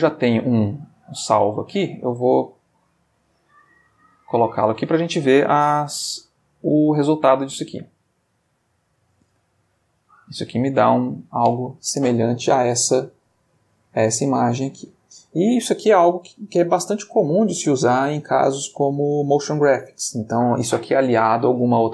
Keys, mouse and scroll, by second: 0.7 click, 2.5 click, 3.9 click, 6.5 click, 8.3 click, 10.1 click.